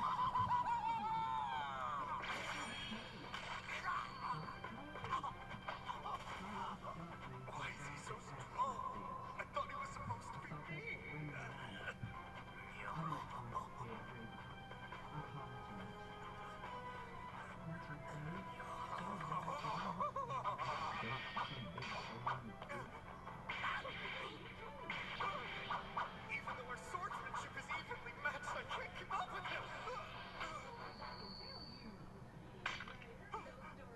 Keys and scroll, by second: 0.8 Down, 1.8 Down, 2.2 Left, 10.2 Right, 11.0 Right, 11.8 Return.